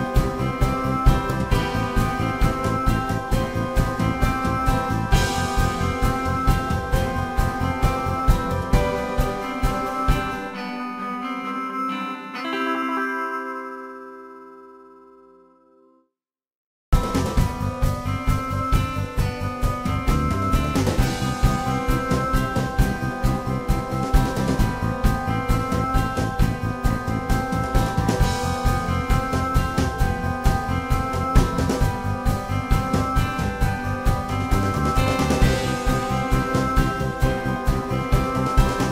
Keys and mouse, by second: 2.4-2.8 drag, 4.0 click, 5.4-9.3 drag, 9.3-10.9 middle drag, 10.9-12.4 drag, 12.2 middle click, 12.4 middle drag, 12.6-14.3 drag, 14.3 s, 14.3-14.6 middle drag, 14.6-16.0 drag, 17.5-18.6 drag, 18.8 y, 19.8 s, 21.0-22.2 drag, 24.1-26.7 drag, 24.1 y, 29.2-31.9 drag, 29.3 s, 31.0 y, 33.9 s, 38.2-38.9 middle drag.